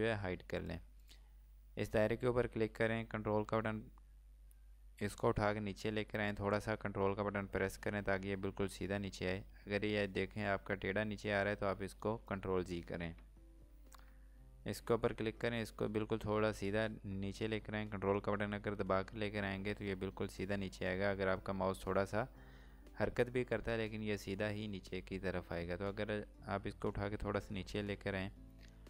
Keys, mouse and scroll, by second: 0.6 click, 5.1 click, 15.4 click.